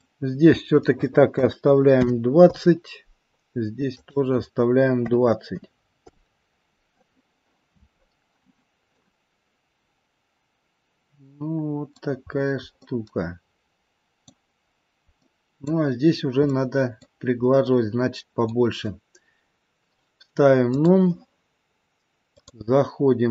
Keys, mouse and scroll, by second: 3.8 click, 8.8 middle click, 12.2 scroll up 2, 12.7 middle click, 14.6-15.2 scroll down 1, 15.2 middle click, 16.3 middle click, 17.5 middle click, 20.8 click, 22.2 click.